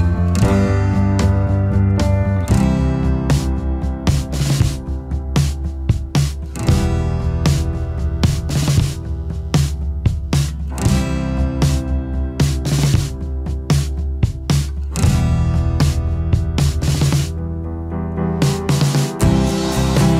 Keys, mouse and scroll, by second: 11.2 alt+scroll down 1, 11.5 space, 13.1-14.3 alt+scroll up 1.